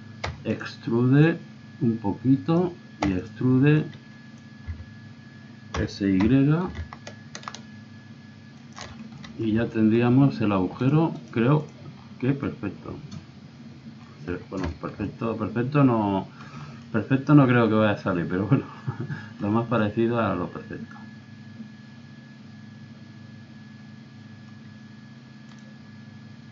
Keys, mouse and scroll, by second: 0.2 e, 1.2 click, 3.0 e, 3.8 click, 4.7 z, 5.7 s, 8.9 middle click, 9.5 z, 10.1 click, 10.3 click, 11.1 click, 11.7 z, 12.7 middle click, 13.0 middle click, 13.2 middle click, 13.6 middle click, 14.7-16.1 middle drag, 16.6 middle click, 17.0 middle click, 17.1-18.6 middle drag, 19.5 middle click, 20.1-21.8 middle drag.